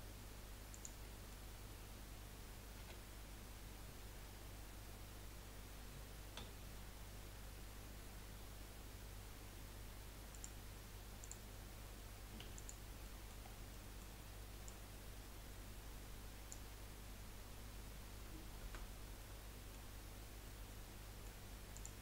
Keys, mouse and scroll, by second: 1.0-2.9 middle drag, 2.9 s, 11.2 click, 12.4 3, 12.5 click, 13.0 middle click, 13.5 scroll down 2, 13.7 middle click, 14.6 click, 16.8-18.4 scroll up 1, 18.6 a, 19.2 middle click, 20.1-20.6 scroll up 1, 20.6-21.7 middle drag, 21.7 click.